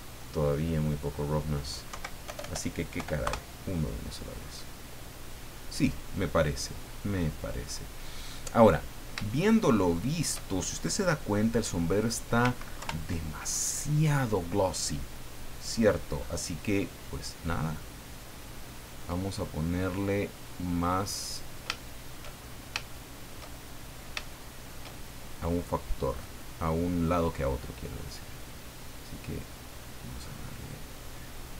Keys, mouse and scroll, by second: 0.8 click, 1.9 Right, 2.3 BackSpace, 3.0 KP_1, 3.2 KP_Enter, 5.8 scroll down 2, 8.8-9.1 scroll up 2, 9.3-10.4 shift+middle drag, 12.7 ctrl+Left, 15.8-16.4 scroll up 4, 17.0 right click, 21.7 shift+middle click, 22.4-22.8 shift+scroll up 2, 22.9-24.2 shift+middle drag, 24.4 shift+middle click, 25.4 click, 26.1 click, 28.7-31.5 drag.